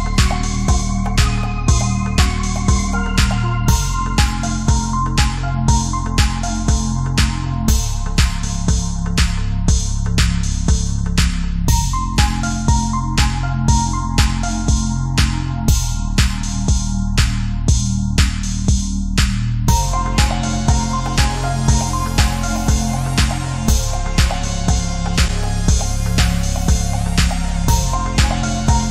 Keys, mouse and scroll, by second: 6.9 space, 7.0 click, 7.1 space, 7.5 click, 12.7-13.5 typing, 13.5 click, 14.7 space, 14.8 click, 16.4 space, 16.5 click, 16.7 click, 17.6 space, 18.8 right click, 19.0-22.3 drag, 22.5-25.8 drag, 25.8 right click, 25.9 click.